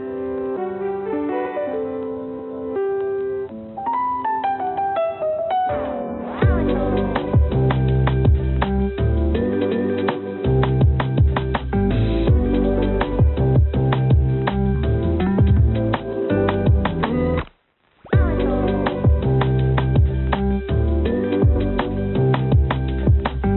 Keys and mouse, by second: 0.8 click, 1.5 shift+d, 3.8 click, 5.1 click, 6.8 click, 7.7 g, 8.8 g, 11.0 g, 13.3 x, 14.2 click, 14.7 g, 19.8 g, 22.8 shift+d.